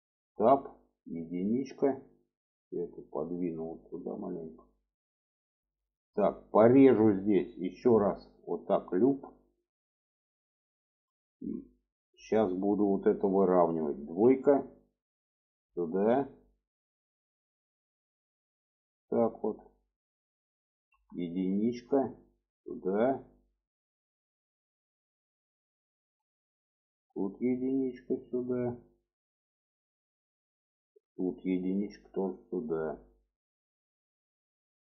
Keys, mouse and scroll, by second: 1.0 1, 1.7 click, 2.7-4.7 drag, 5.6 shift+middle click, 7.5 click, 9.4 click, 10.5 click, 11.1 shift+middle click, 12.2 shift+middle click, 13.9 2, 14.3 click, 15.3-18.7 drag, 20.7 1, 21.4 click, 22.2 click, 25.7-26.0 shift+middle drag, 26.8 drag, 27.5 click, 30.8 click, 31.4 click, 33.2-34.1 shift+middle drag.